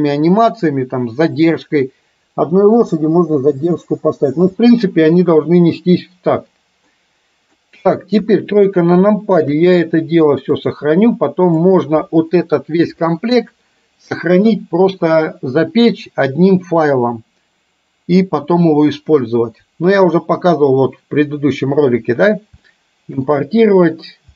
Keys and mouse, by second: 4.5 space, 7.0-7.6 middle drag, 8.4 KP_3, 9.1-9.6 shift+middle drag, 10.9-11.9 drag, 22.7-23.2 shift+middle drag.